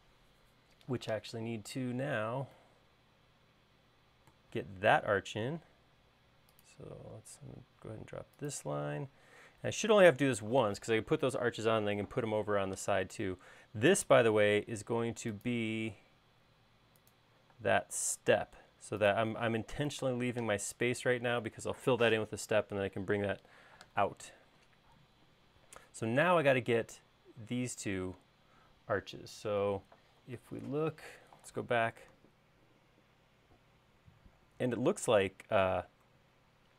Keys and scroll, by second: 9.7 space, 15.1 l, 18.3 space, 20.6 BackSpace, 32.7 super+Tab, 36.5 super+Tab.